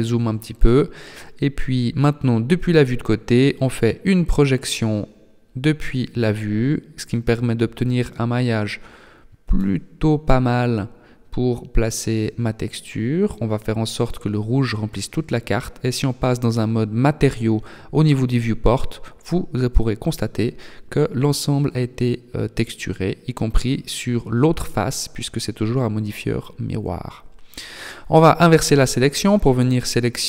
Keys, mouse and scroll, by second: 0.1-1.8 scroll up 1, 2.0 u, 3.8 s, 8.4 g, 13.2 click, 14.9-15.4 scroll up 1, 15.4 Tab, 16.0-16.4 scroll up 1, 16.7 middle click, 20.4 Tab, 20.8 middle click, 23.2 middle click, 25.0 click, 26.5 click, 28.0 middle click.